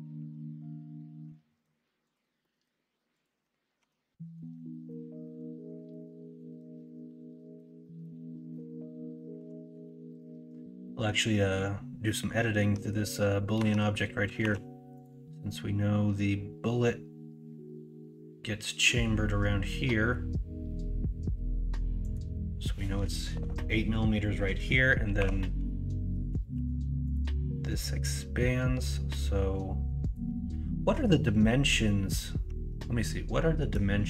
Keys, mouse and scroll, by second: 1.3-1.6 middle drag, 2.4 middle drag, 3.8 Tab, 4.3 middle click, 4.8 middle click, 7.8 middle click, 9.3 KP_1, 9.6 KP_3, 12.7 Tab, 13.6 Tab, 14.4 ctrl+r, 25.2 3, 26.5 ctrl+r.